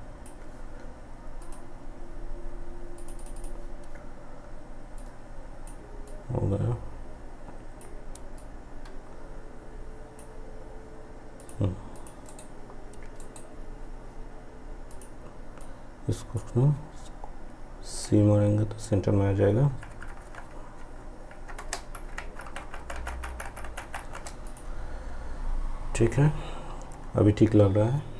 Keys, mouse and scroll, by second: 11.3 right click, 13.9-17.0 drag, 17.0 c, 23.5 click.